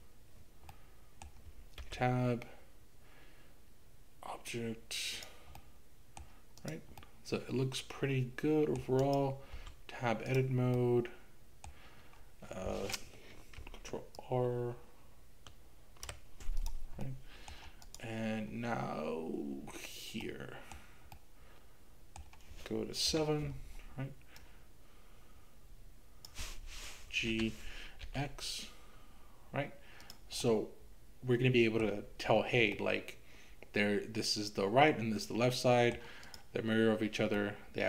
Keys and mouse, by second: 0.9 middle click, 1.8 Tab, 5.6 middle click, 6.6 click, 7.1-8.9 middle drag, 9.0 click, 9.6 Tab, 10.8 middle click, 13.6-16.1 ctrl+r, 16.6 click, 17.2 middle click, 18.0 click, 20.3 middle click, 21.2-22.2 middle drag, 23.1 KP_7, 24.4-26.3 drag, 27.3 g, 28.0 x, 30.1 click, 30.4-31.9 middle drag, 32.9-36.1 middle drag, 37.4-37.8 middle drag.